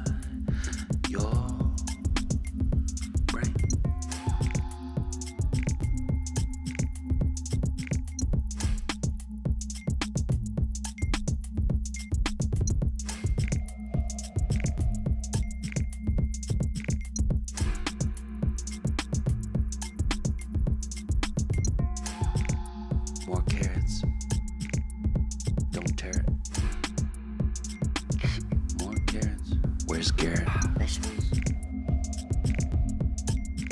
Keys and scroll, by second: 6.1 Up, 6.1 Up, 8.6 Up, 10.1 Up, 11.8 Down, 13.8 Down, 13.9 Down, 17.3 ctrl+t, 22.0 Return.